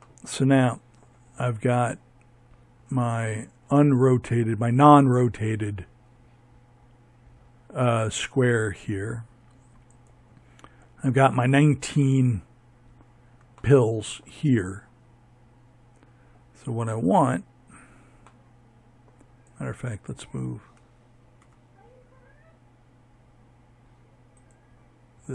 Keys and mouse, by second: 7.8-9.0 right drag, 17.3-19.3 right drag, 19.3 m, 24.5-25.3 drag.